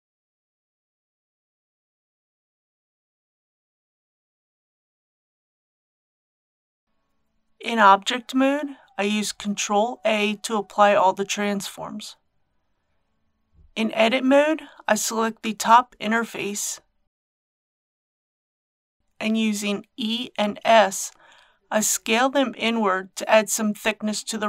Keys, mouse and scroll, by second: 7.0 Tab, 9.2 ctrl+a, 11.3 click, 13.8 Tab, 14.2 3, 15.1 KP_7, 16.1 click, 17.2 c, 18.5 click, 19.0 right click, 19.3 e, 21.7 s.